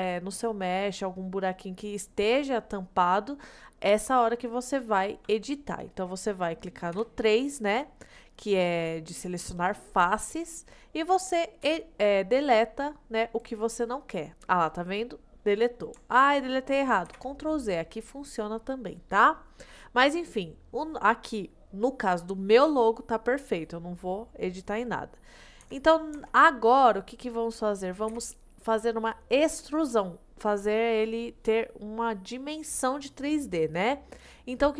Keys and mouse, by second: 7.0 3, 11.7 Delete, 17.2 ctrl+z, 25.7 Tab, 26.2 Tab, 28.2 a.